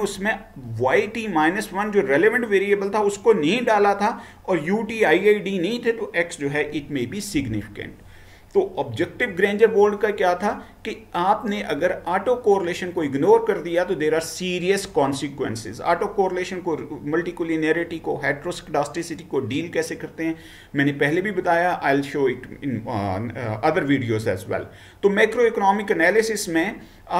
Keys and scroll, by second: 7.4 Right.